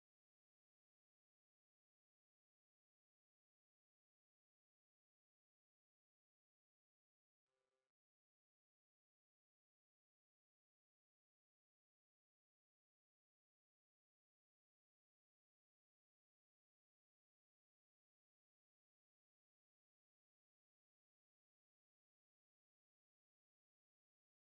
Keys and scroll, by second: 1.3 ctrl+z, 6.0 ctrl+space.